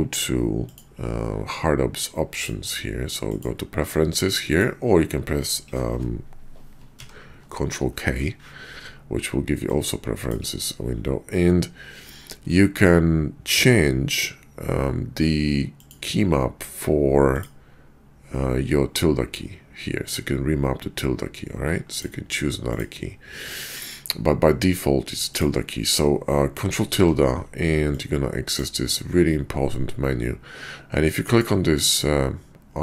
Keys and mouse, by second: 2.4-6.7 drag, 6.9 ctrl+k, 26.8 ctrl+`.